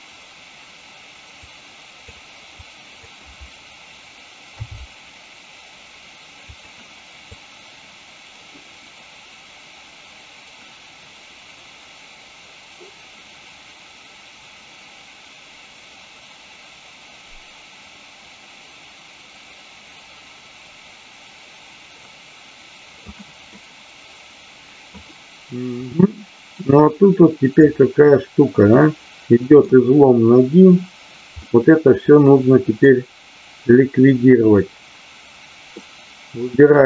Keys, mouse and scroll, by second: 1.5 click, 2.6 click, 6.5 click, 7.3-23.1 drag, 23.4-25.0 middle drag, 25.7-27.6 drag, 28.6-29.6 middle drag, 31.4-33.0 middle drag, 35.7-36.4 middle drag.